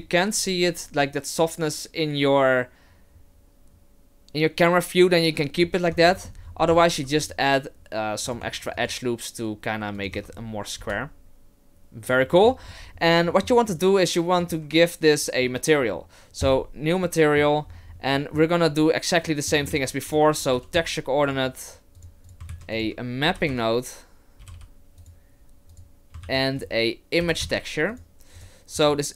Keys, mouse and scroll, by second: 5.5-6.9 scroll down 7, 5.9 Tab, 6.1 middle click, 6.9 ctrl+r, 8.5 ctrl+r, 10.1 Tab, 10.8 KP_0, 12.3 middle click, 12.6-13.3 scroll down 7, 13.3 middle click, 13.7 right click, 14.4 right click, 16.4 click, 17.0 middle click, 17.7-18.7 scroll down 6, 18.1 middle click, 18.7-19.3 scroll down 1, 19.3 middle click, 19.7 shift+a, 22.3 click, 22.5 shift+a, 24.5 p, 26.2 shift+a, 28.8-29.1 scroll up 3.